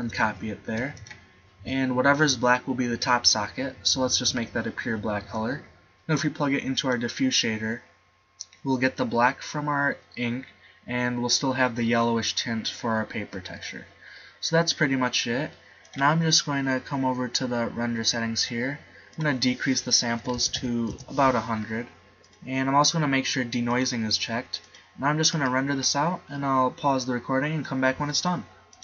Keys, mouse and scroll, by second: 0.4 ctrl+v, 17.5-20.4 middle drag, 20.8 0, 26.3-28.7 middle drag.